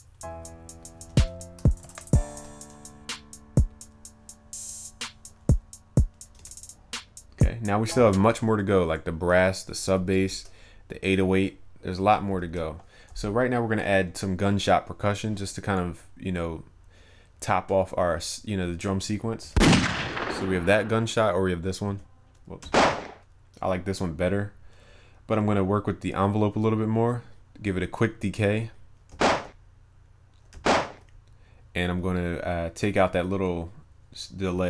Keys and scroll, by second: 2.3 ctrl+s, 10.0 alt+Up.